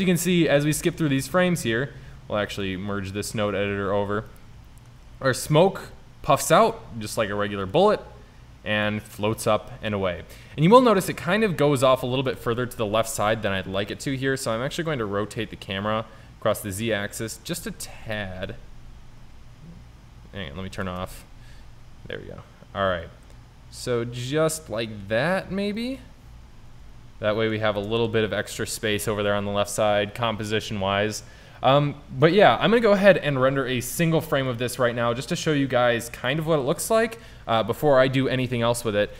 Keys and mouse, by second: 4.2 click, 5.4-6.5 drag, 7.1-11.0 drag, 12.6 shift+z, 13.2-14.9 drag, 14.7 r, 18.2 Tab, 20.9 shift+Tab, 21.6 r, 25.9-27.7 drag, 28.2 shift+z, 34.6 click, 39.1 click.